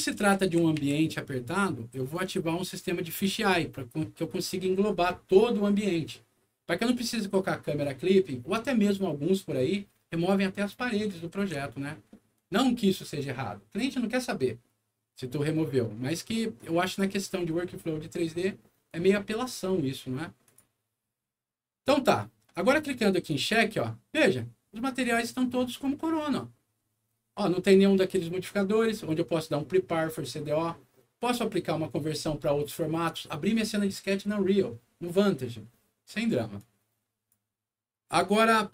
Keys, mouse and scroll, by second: 0.3 alt+w, 1.0 middle click, 2.0-3.1 drag, 3.4 scroll down 1, 11.3 alt+w, 12.0 alt+middle click, 15.5-17.0 middle drag, 18.8 click, 20.4 click, 22.1 click, 23.2 click, 36.5 click.